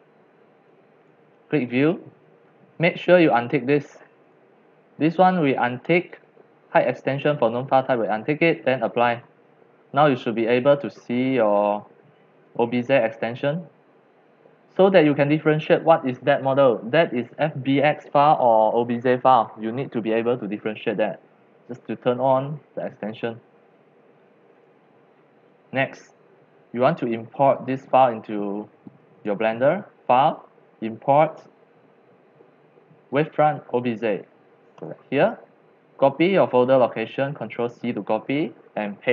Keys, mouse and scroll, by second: 0.6-1.1 drag, 1.9 click, 4.2 click, 4.9-7.7 drag, 9.1 click, 10.4-14.2 drag, 24.7-25.4 drag, 25.5 drag, 26.0-27.9 drag, 29.1 click, 31.1 click, 34.8 click, 36.2 click, 37.5 ctrl+c, 39.0 click.